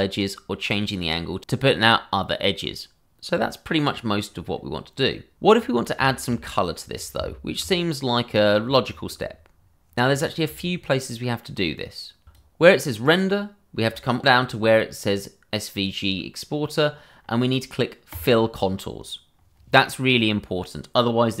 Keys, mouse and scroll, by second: 5.0 click, 5.5 scroll down 1, 6.0 shift+middle click, 6.9 scroll down 1, 7.6 Tab, 12.2 click, 13.8-14.2 scroll, 14.2 scroll down 1, 18.7 click.